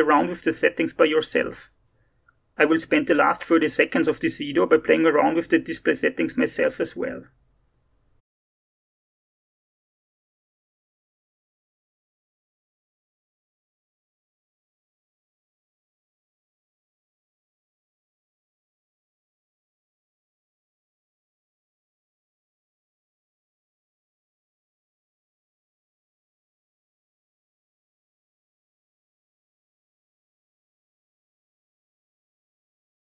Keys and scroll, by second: 8.2 0, 9.9 0, 18.7 0.